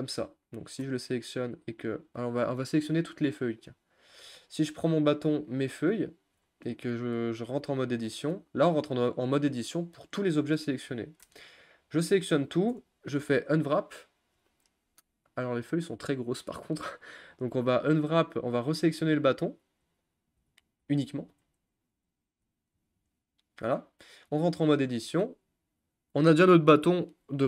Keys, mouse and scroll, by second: 0.8 a, 3.3 Tab, 3.8 click, 4.5 shift+click, 5.3 shift+click, 6.5-7.9 middle drag, 7.9 Tab, 8.5-8.9 scroll down 4, 8.9 scroll up 1, 9.0-11.2 middle drag, 11.2 a, 13.6 u, 17.6 click, 18.2 ctrl+z, 18.7 ctrl+z, 19.8 ctrl+z, 20.4 ctrl+z, 21.2 ctrl+z, 22.1 Tab, 22.8 Tab, 23.1 click, 24.3 Tab, 25.2 a.